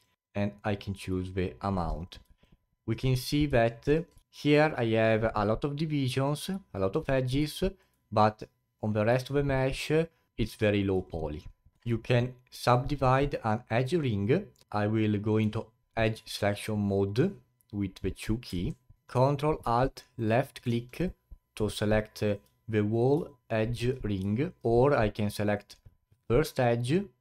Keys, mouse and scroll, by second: 2.4 alt+click, 3.2-3.7 scroll up 4, 3.7 alt+middle click, 4.0 scroll down 2, 4.2-6.6 alt+drag, 6.7-8.9 alt+drag, 8.9-9.2 scroll down 2, 11.0 alt+click, 11.7-14.6 alt+middle drag, 16.2 alt+click, 18.4 2, 20.2 ctrl+alt+click, 21.0-24.8 alt+drag, 25.4 click.